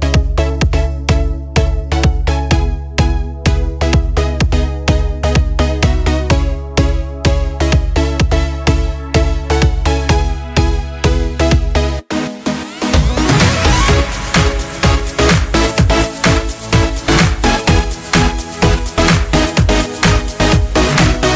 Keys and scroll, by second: 0.0-1.3 typing.